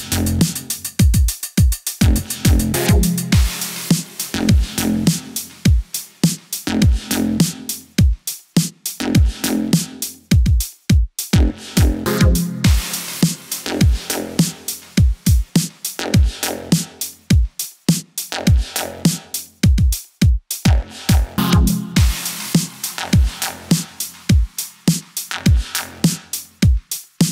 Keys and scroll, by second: 0.2 super+z, 5.6 KP_0, 5.9 space.